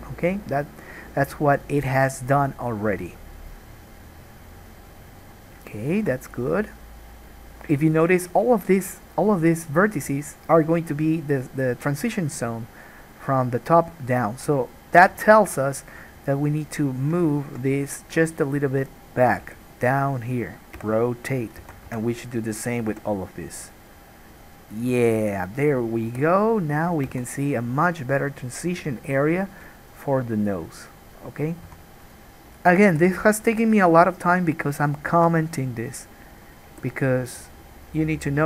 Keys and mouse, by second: 0.0-5.3 right drag, 5.3-15.3 drag, 15.2 3, 15.3 middle click, 15.5-32.2 drag, 19.6 g, 21.0 r, 21.8 alt+a, 22.1 2, 22.3 middle click, 22.3 right click, 23.1 g, 25.4 middle click, 25.4 right click, 26.3 g, 27.4 alt+a, 31.9 1, 32.2 middle click, 32.3-38.4 drag, 33.1 g, 35.4 alt+a, 36.0 middle click, 36.0 right click, 36.9 g.